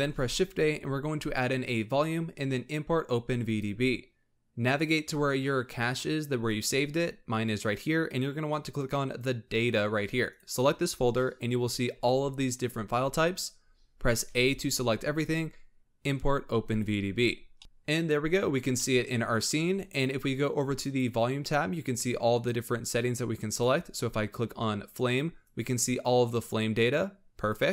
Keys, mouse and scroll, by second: 17.5-18.6 middle drag, 18.6 scroll down 2, 18.7-19.4 middle drag, 19.4 scroll up 3, 20.7 click, 22.1-22.5 scroll down 3, 22.5 scroll up 2, 23.4 click, 25.4-27.7 drag.